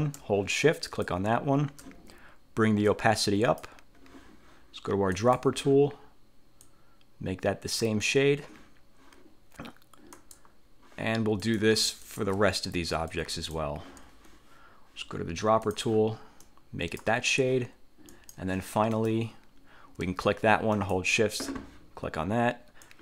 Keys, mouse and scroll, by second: 1.0 shift+click, 3.0 click, 5.2 click, 6.8-8.1 drag, 10.2 click, 11.5 click, 12.2 shift+click, 13.2 click, 15.8 click, 16.5 click, 18.2 click, 19.0 click, 20.8 shift+click, 22.9 click.